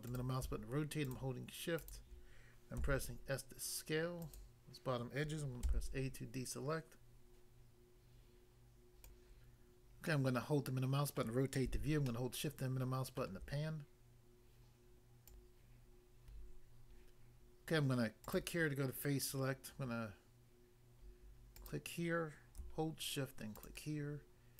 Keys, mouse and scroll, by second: 0.0 click, 1.1 shift+click, 1.8 shift+click, 2.8 s, 4.2 click, 5.7 a, 9.0 click, 9.2 click, 10.1 middle click, 11.2 middle click, 12.1 shift+middle click, 15.2 click, 15.4 click, 18.2 click, 18.4 click, 21.6 click, 23.6 shift+click.